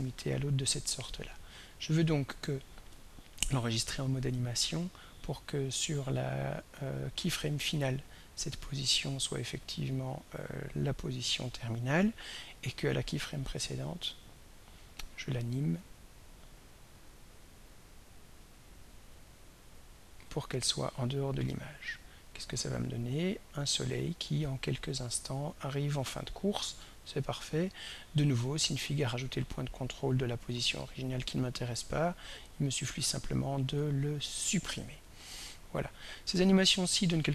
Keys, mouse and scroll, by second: 9.8 click, 15.8 click, 17.7-19.3 drag, 22.6-30.5 drag, 31.8 right click, 33.8 click, 35.5-37.3 drag.